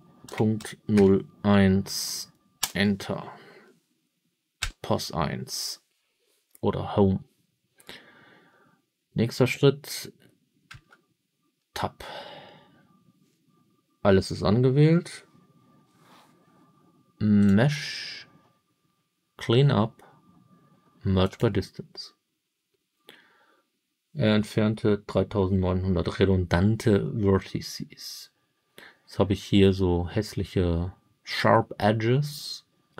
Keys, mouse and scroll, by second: 0.2 ., 0.5 0, 0.9 1, 2.5 Return, 4.5 Home, 10.6 Tab, 17.3-21.3 drag.